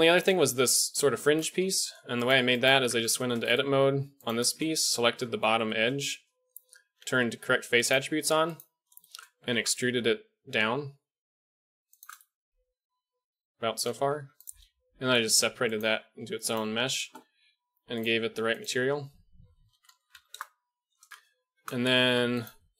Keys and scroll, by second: 2.8 Tab, 6.9 q, 8.2 q, 9.4 e, 14.1 3, 15.1 p, 15.9 Tab, 22.2 Tab.